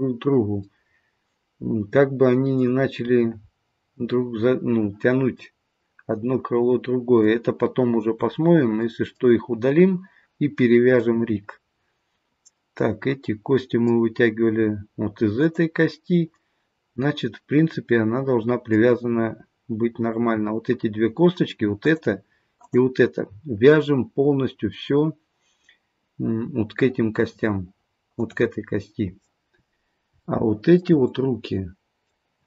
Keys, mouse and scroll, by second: 3.1-3.6 scroll down 2, 5.4 middle click, 7.9-8.3 scroll up 1, 8.8 scroll up 1, 8.9 middle click, 10.9 middle click, 15.4 click, 16.3 middle click, 20.0-21.4 scroll down 1, 21.4-21.8 scroll up 1, 21.8 click, 22.6 click, 28.1 click, 30.1-30.6 shift+scroll up 1, 30.6 shift+middle click, 31.1 middle click.